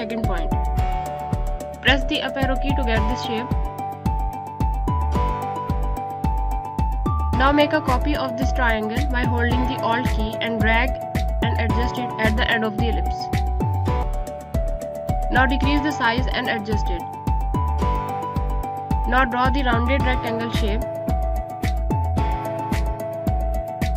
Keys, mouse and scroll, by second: 0.4 Up, 5.1 Down, 6.6 Up, 7.3 click, 9.8 alt+click, 13.5 alt+shift+click, 14.7 click, 18.0 scroll up 1, 20.7 right click, 20.9 click.